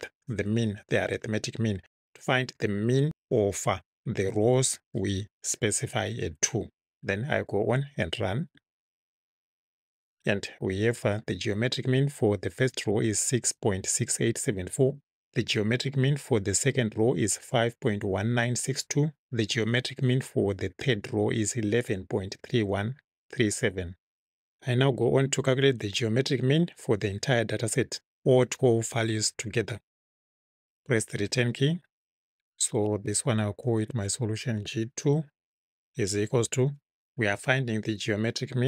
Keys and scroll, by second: 31.3 Return, 33.7 shift+g, 34.7 2, 35.7 =.